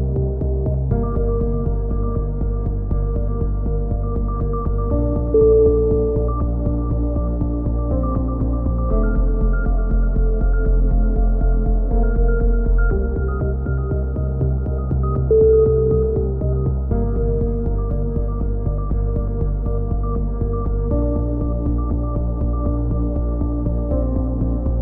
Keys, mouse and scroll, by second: 1.1 z, 3.7 z, 4.2 a, 5.4 Tab, 5.9 click, 10.2 middle click, 10.6-12.0 drag, 12.0 middle click, 16.2 KP_3, 16.8 Tab, 17.0 z, 17.7 click, 23.8-24.8 middle drag, 23.8 z.